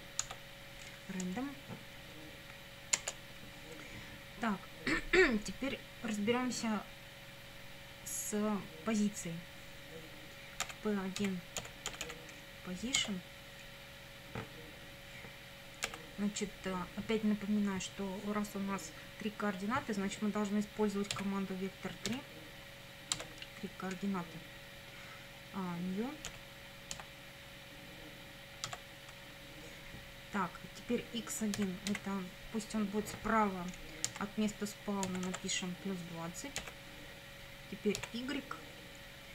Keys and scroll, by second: 0.2 Tab, 3.0 Return, 10.6-12.5 typing, 13.0 Tab, 15.9 =, 21.2 v, 22.1 e, 23.2 Tab, 26.3 ., 27.0 n, 28.7 Tab, 31.6 x, 32.0 1, 34.8-36.6 typing, 38.0 y.